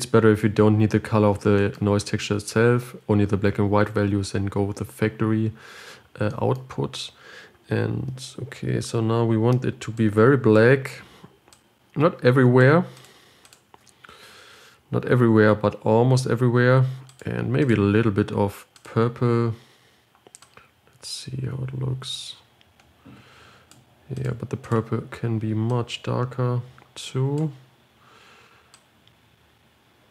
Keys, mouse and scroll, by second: 14.6 ctrl+shift+click, 17.6 click, 20.9-23.8 drag, 24.6-25.1 drag, 29.4-30.1 drag.